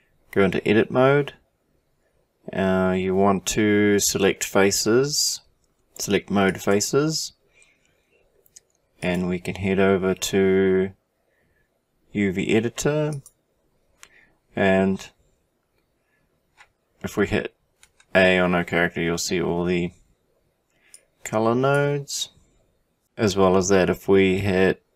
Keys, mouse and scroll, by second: 8.0 click, 17.8 a, 21.4 click.